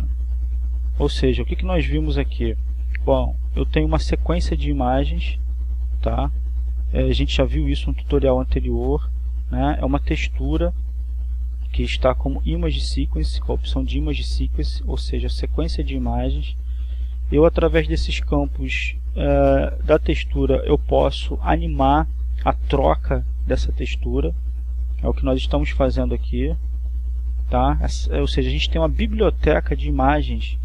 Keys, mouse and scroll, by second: 12.0-13.4 drag, 19.0-20.2 drag, 23.4-28.5 drag, 28.6-30.5 drag.